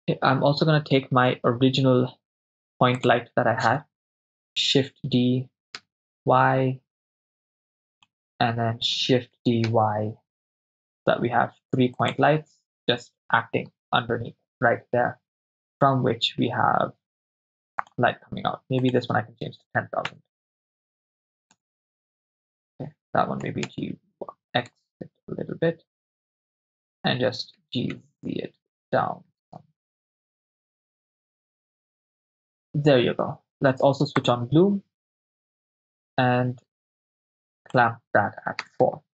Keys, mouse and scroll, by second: 3.0 click, 4.8 shift+d, 5.8 y, 8.0-9.5 drag, 9.5 shift+d, 9.7 y, 12.0-12.4 drag, 17.8 drag, 18.8-21.8 drag, 20.3 0, 20.5 0, 23.4 g, 23.7 y, 24.7 x, 26.9 click, 27.5 g, 28.0 z, 31.4 drag, 34.2-35.9 drag, 37.6-38.9 drag.